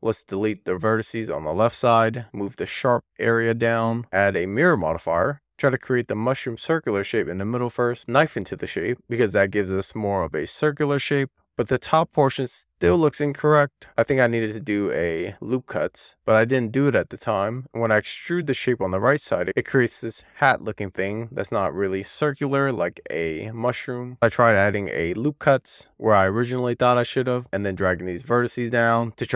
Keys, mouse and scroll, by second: 0.3 x, 0.9 alt+z, 1.1 click, 1.2 x, 1.5 x, 1.8 scroll down 1, 1.9 alt+scroll up 1, 2.2 click, 3.2 click, 4.0 super+z, 4.8 click, 5.5 click, 6.6 click, 7.9 click, 8.0 middle click, 8.9 k, 11.6-12.7 middle drag, 13.1-14.5 scroll down 1, 14.5 k, 17.0 middle click, 17.8 alt+z, 18.2 click, 18.8 alt+z, 20.2 d, 23.5 click, 24.1 super+z, 25.9 ctrl+r, 27.3 alt+z, 27.4 click, 28.3 alt+z, 28.6 alt+z, 29.2 alt+z.